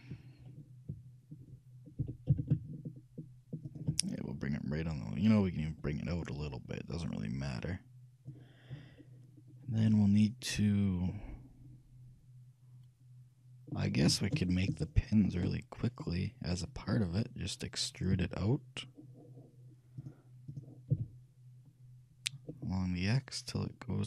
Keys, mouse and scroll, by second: 2.1 g, 4.2-5.1 scroll up 1, 5.1 scroll up 1, 5.4-6.5 scroll down 1, 6.5-8.3 drag, 11.2-12.9 middle drag, 14.5-17.9 shift+middle drag, 18.3 e, 20.1-22.1 drag, 21.0 e.